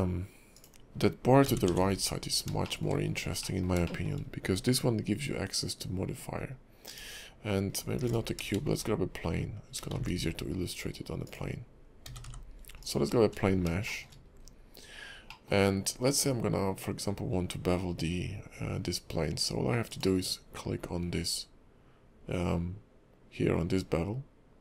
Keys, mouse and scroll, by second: 1.4 g, 2.6 shift+middle click, 3.0-3.6 scroll up 2, 3.4 middle click, 3.8 shift+middle click, 6.9 click, 7.7 scroll down 1, 8.0 x, 8.5 shift+a, 9.9 shift+a, 12.0 g, 13.1-13.7 scroll up 5, 13.8 shift+middle click, 14.2 scroll up 2, 14.4-15.1 scroll down 2, 15.3 middle click, 15.6-16.2 scroll up 1, 16.2-16.6 scroll up 1, 19.9 click.